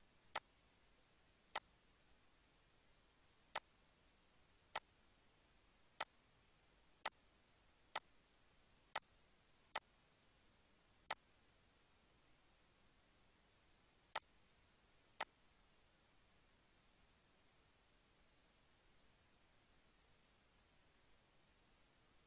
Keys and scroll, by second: 10.3 ctrl+s.